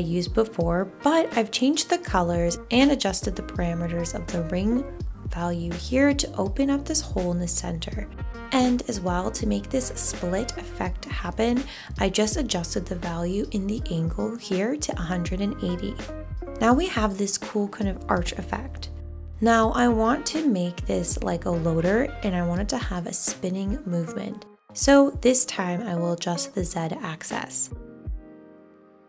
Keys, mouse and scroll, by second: 13.1 1, 13.7 Return.